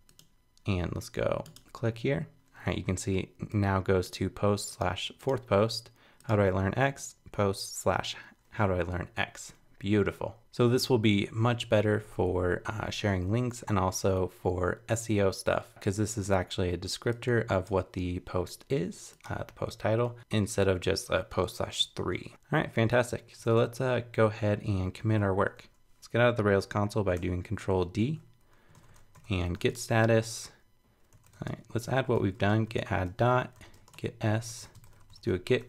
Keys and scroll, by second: 23.4 super+Tab, 28.0 ctrl+d, 28.7 super+k.